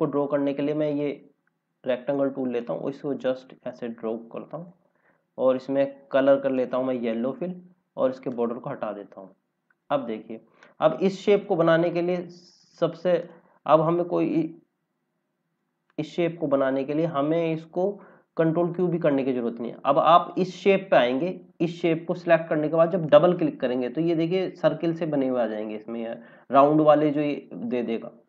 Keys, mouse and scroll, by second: 2.5 click, 8.2 right click, 9.6 click, 10.3 scroll up 1, 11.3 click, 11.8 scroll up 1, 12.1-12.7 scroll down 1, 12.9 scroll up 1, 13.1 click, 18.2 scroll down 1, 20.1 scroll up 1, 20.3-21.1 scroll down 1, 23.0 click.